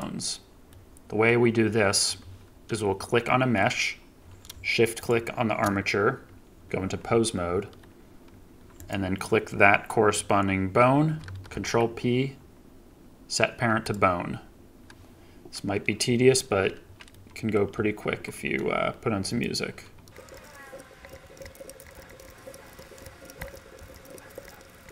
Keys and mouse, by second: 0.6-1.2 middle drag, 3.2 middle click, 7.4 ctrl+Tab, 8.7 click, 11.4 ctrl+p, 17.0-17.5 drag, 18.0 ctrl+Tab, 20.7 ctrl+p, 21.1 ctrl+Tab, 21.4 ctrl+Tab, 21.4 click, 21.6 ctrl+p, 21.9 ctrl+Tab, 22.2 ctrl+Tab, 22.5 ctrl+p, 22.7 ctrl+Tab, 23.0 ctrl+Tab, 23.2 ctrl+p, 23.5 ctrl+Tab, 23.9 ctrl+Tab, 24.1 ctrl+p, 24.4 ctrl+Tab.